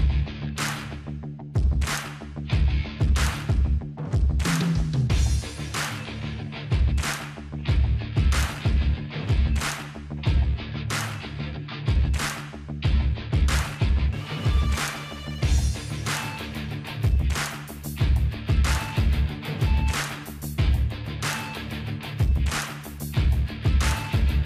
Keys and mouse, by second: 0.2 middle click, 0.9-2.4 drag, 2.4-4.5 middle drag, 4.3 Tab, 4.8 a, 5.7 middle click, 6.2 click, 8.8 click, 9.4 ctrl+i, 9.6 h, 10.0 click, 10.4 Tab, 10.7 Tab, 11.2 right click, 11.6 Tab, 11.8 click, 11.8 middle click, 12.4-16.1 drag, 14.2-16.1 right drag, 16.1 middle click, 17.9 middle click, 18.9 ctrl+z, 20.1 middle click, 21.8 click, 21.8 right click, 22.2-24.1 middle drag, 23.6 ctrl+b.